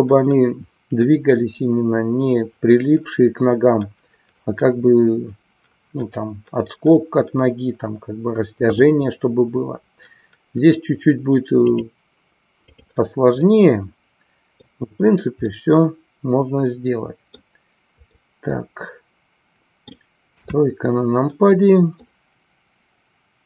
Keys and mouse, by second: 11.6-13.0 drag, 13.4-14.6 middle drag, 15.5-17.5 middle drag, 18.1-20.1 middle drag, 20.4 KP_3, 22.1-23.4 middle drag.